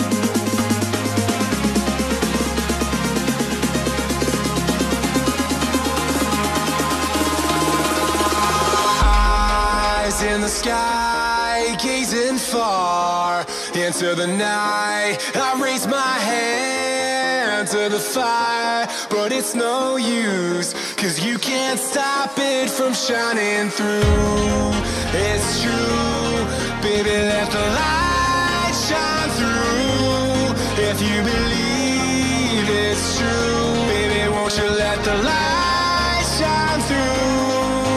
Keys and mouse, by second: 1.8 click, 2.9 KP_3, 7.5 g, 11.0 click, 13.1 s, 16.0 click, 16.4 middle click, 18.8 right click, 20.9 click, 21.8 middle click, 26.0 middle click, 28.8 middle click, 30.1 KP_3, 34.1 e, 36.5 click.